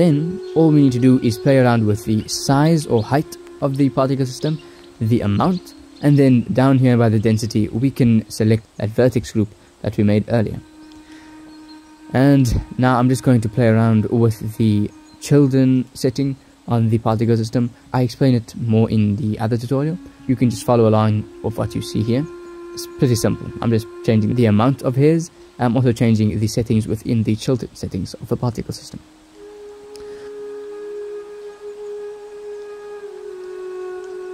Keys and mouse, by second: 3.3-5.3 drag, 9.7 click, 12.3 click, 12.3 middle click, 12.5 click, 18.7-20.0 drag, 24.7 click, 26.5 click, 27.1 click, 27.5 middle click, 29.3 shift+z, 31.2-32.7 drag.